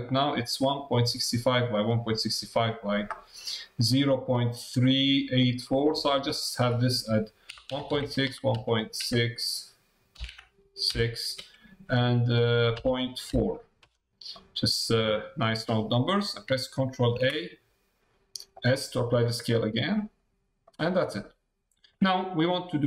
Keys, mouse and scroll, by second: 6.6-14.1 drag, 14.3-16.0 middle drag, 20.1 middle click, 21.2 middle click.